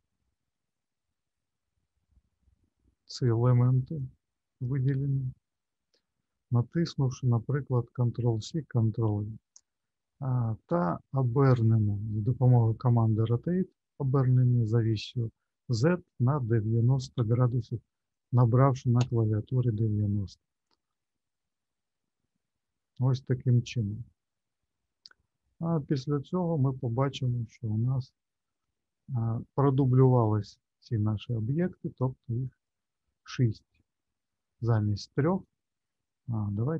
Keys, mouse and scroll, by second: 0.4 middle click, 3.5 click, 4.0 click, 5.6 shift+middle click, 7.4 middle click, 8.7 ctrl+c, 9.2 ctrl+v, 13.2 r, 20.5 middle click, 23.9 middle click, 32.6 click, 36.2 middle click.